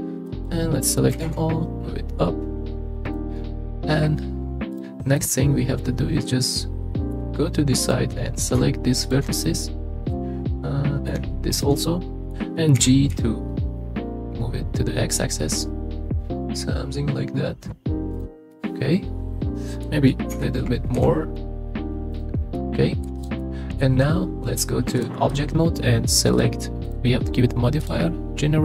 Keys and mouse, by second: 0.3 click, 1.1 g, 1.2 z, 5.2-6.9 middle drag, 7.8 click, 9.1 shift+click, 9.5 middle click, 10.4 middle click, 11.8 middle click, 12.8 g, 13.1 x, 18.1 click, 18.5-19.8 middle drag, 20.3 g, 20.9 x, 22.6 middle click, 23.4 middle click, 25.0-25.4 drag, 26.3 click, 26.9-27.8 drag.